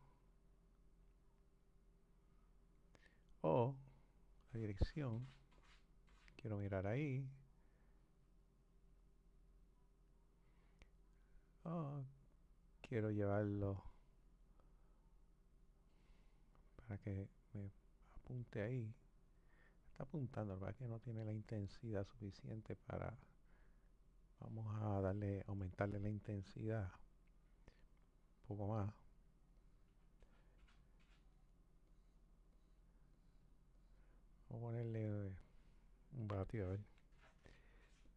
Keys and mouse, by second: 3.7 click, 7.5 click, 12.2 click, 18.0 click, 26.7 click, 27.8-38.1 drag.